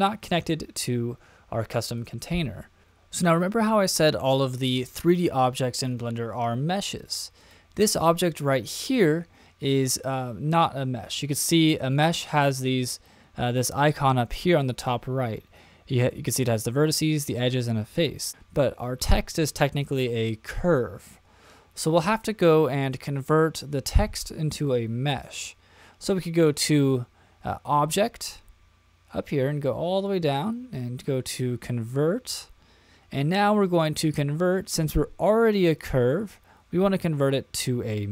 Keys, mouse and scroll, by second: 2.0 click, 7.4 click, 26.4-38.1 drag.